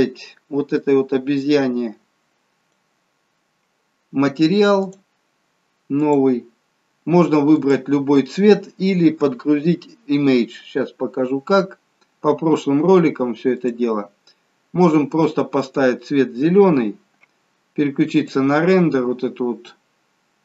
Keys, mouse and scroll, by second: 1.0 click, 5.0 click, 6.2 click, 13.8 click, 19.3 click.